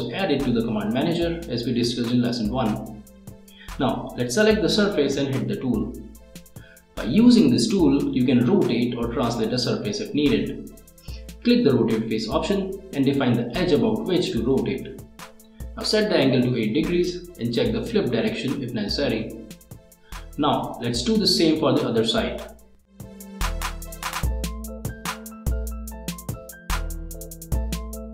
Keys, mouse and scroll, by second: 5.6 click, 7.8 click, 9.5 click, 10.6 click, 11.2-12.3 middle drag, 12.4 ctrl+middle click, 12.9-13.6 scroll up 2, 13.6 middle click, 20.4 click, 21.8 Return, 22.9 middle click, 23.1 click, 23.9 click, 25.1 click, 25.9 middle click, 26.8 click, 27.2 middle click.